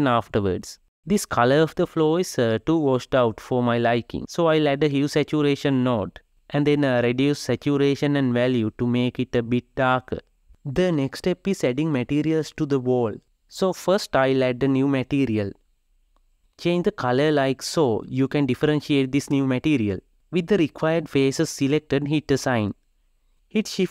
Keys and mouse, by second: 1.0 Tab, 7.0 click, 8.5-10.1 drag, 10.8 shift+click, 12.3-15.8 drag, 16.8 click, 22.6 click, 23.8 shift+a.